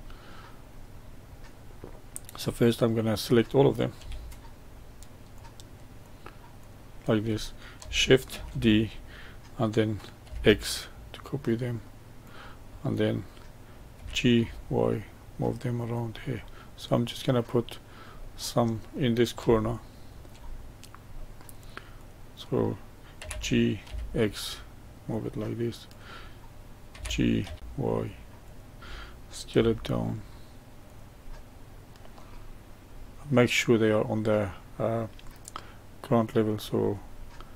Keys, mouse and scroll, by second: 0.9-1.3 scroll up 2, 1.8-2.8 middle drag, 2.8 click, 4.6 shift+click, 5.3 shift+click, 5.9 shift+click, 6.5 shift+click, 8.3 shift+d, 13.9 g, 16.3-17.6 middle drag, 17.6-18.1 scroll up 1, 18.1-20.5 middle drag, 20.5-21.1 scroll up 1, 21.1-21.9 middle drag, 21.9 click, 23.1 g, 25.8 click, 26.9 g, 29.5 s, 31.3-32.4 middle drag, 32.4-33.0 scroll up 1, 33.0-36.0 middle drag, 36.4 click, 37.3-37.5 middle drag.